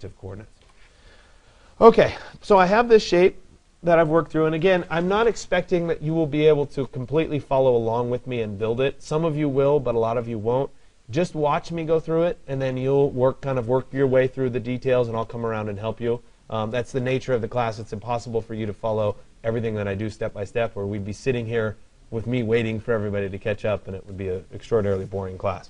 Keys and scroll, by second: 0.2 Delete.